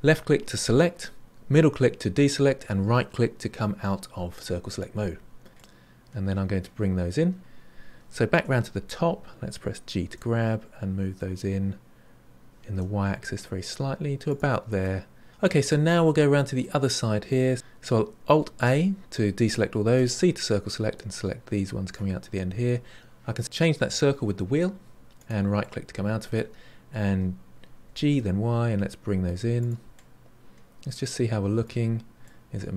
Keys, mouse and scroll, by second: 5.5-7.4 middle drag, 8.3 KP_7, 10.0 g, 14.8-16.0 middle drag, 16.0-16.6 scroll up 3, 16.6 middle click, 18.4 alt+a, 19.9 c, 25.5 middle click, 27.8 g, 30.1-31.8 middle drag, 31.8-32.2 scroll down 3, 32.2-32.7 middle drag.